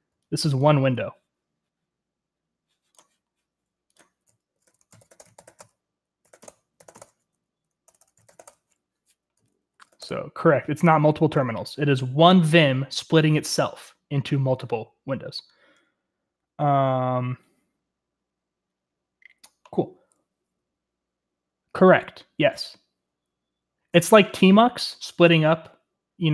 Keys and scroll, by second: 1.1 typing, 2.2-2.9 typing, 4.4-10.1 typing, 6.5 shift+Return, 7.9 Return, 8.0 Return.